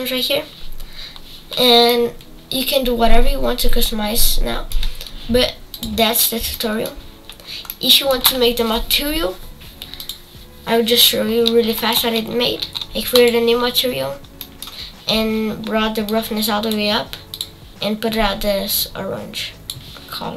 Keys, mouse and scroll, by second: 1.9-5.7 middle drag, 5.7 click, 6.5 middle click, 7.4 scroll up 2, 7.6-10.4 middle drag, 10.4 click, 11.2-11.7 scroll up 6, 11.7-14.0 shift+middle drag, 14.0 click, 14.4 middle click, 15.1-15.9 scroll up 4, 15.9 scroll up 1, 16.1-18.1 drag.